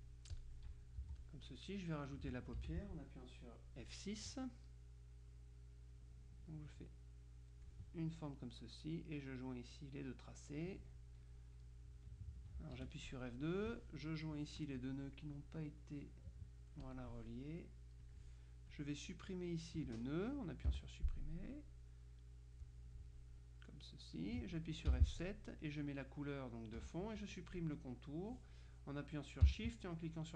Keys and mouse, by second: 0.0-1.0 drag, 1.1 z, 1.2 click, 2.6 F6, 5.4-8.2 drag, 9.1-11.3 drag, 12.9 ctrl+F2, 13.2 ctrl+click, 14.9 click, 15.7-17.6 drag, 18.1 click, 18.8 click, 20.8 Delete, 21.6-23.2 drag, 23.5-24.8 drag, 25.0 F7, 25.3 click, 26.8 F1.